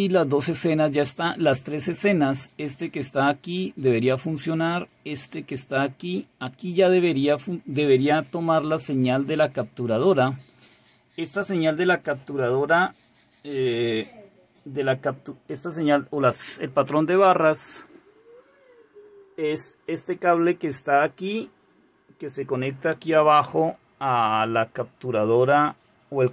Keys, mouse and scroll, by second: 2.6 click, 4.9 click, 5.7 click, 6.0 click.